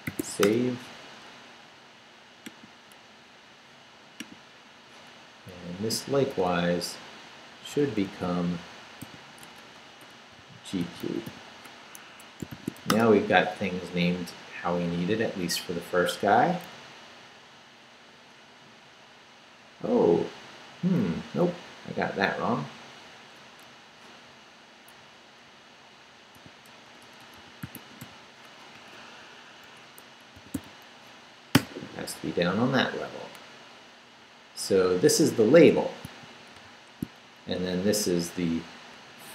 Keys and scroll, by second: 0.0-0.8 typing, 5.5 Up, 5.9 Right, 7.8 Right, 8.3 Right, 9.0-12.8 typing, 12.0 Escape, 12.9 Return, 18.7 Down, 20.8 Up, 21.6 Up, 25.0 Down, 25.4 Right, 26.4-28.5 typing, 28.7 Up, 29.6 Escape, 30.4 d, 31.5 shift+p, 35.0 Up, 36.0 shift+Up, 36.5 shift+v, 37.4 shift+Down, 38.0 Up.